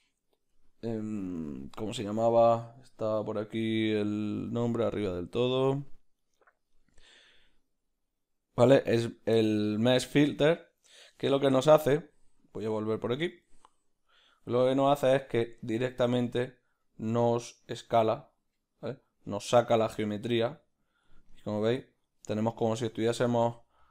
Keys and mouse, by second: 15.3 click, 21.3-23.9 middle drag, 22.9 ctrl+z.